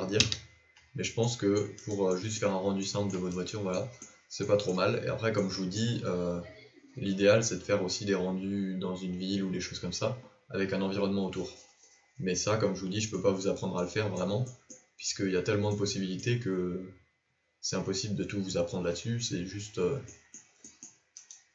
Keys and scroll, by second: 0.2 KP_Decimal.